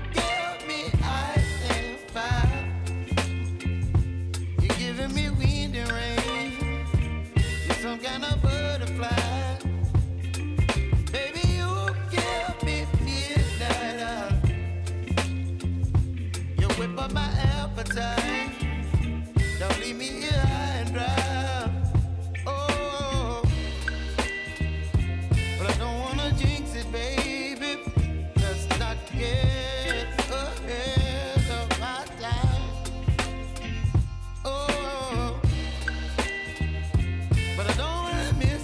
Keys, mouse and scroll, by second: 0.3 click, 1.4 [, 2.0 Page_Down, 2.7 click, 5.8 click, 7.2 [, 8.2 space, 10.1-10.5 typing, 11.4 click, 13.9 space, 15.7 click, 16.3 Return, 17.4-18.9 drag, 18.9 F9, 19.8-24.3 drag, 24.3-26.3 drag, 26.5 space, 28.5-31.1 drag, 31.1-32.6 drag, 33.6 space, 35.5 click, 36.8 space.